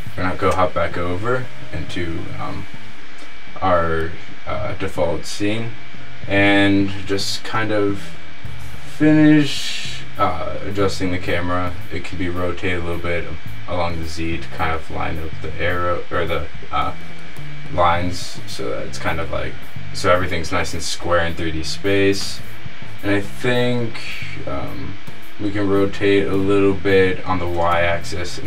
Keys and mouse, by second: 0.0 ctrl+Right, 8.3 r, 21.5 middle click, 22.5-22.9 middle drag, 24.5 r.